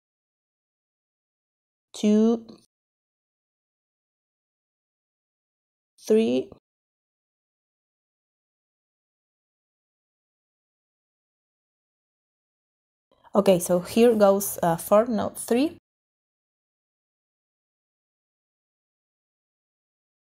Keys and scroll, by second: 14.2 4.